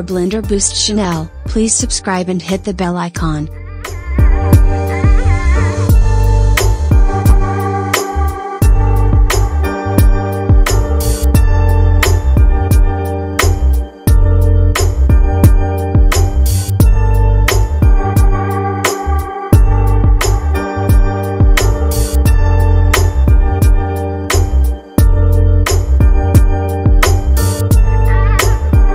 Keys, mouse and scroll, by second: 1.3 s, 6.3 KP_1, 7.4-7.7 scroll down 4, 8.2-8.8 scroll up 2, 9.0-9.8 scroll down 5, 11.9-12.4 drag, 12.9-22.7 drag, 22.7-23.1 scroll down 1, 25.4-26.2 scroll down 4.